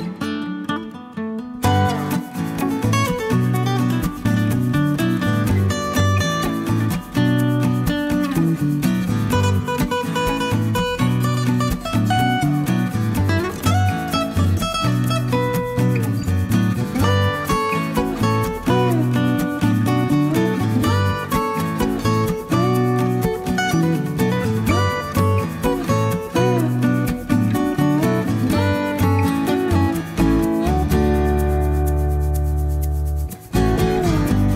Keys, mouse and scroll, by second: 0.5 click, 1.0 click, 2.8 click, 3.6 click, 5.0 click, 10.8 click, 13.3 click, 14.6 click, 15.2 click, 15.9-17.6 middle drag, 18.0-18.4 scroll down 1, 18.4-18.7 scroll up 1, 20.7 click, 21.8 click, 22.8 click, 24.1 click, 26.1 click, 27.4 click, 28.0 click, 29.2-33.0 drag, 32.9 middle click, 33.1 click.